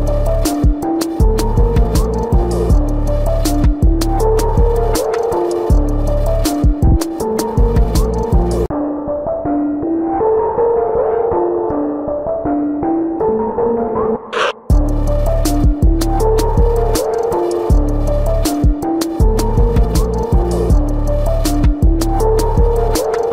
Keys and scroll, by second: 4.2 ctrl+=, 9.8 ctrl+=, 11.2 ctrl+=, 13.1 space, 14.0 ctrl+alt+z, 14.8 space, 15.3 space, 17.1 space, 17.7 space, 18.6 space.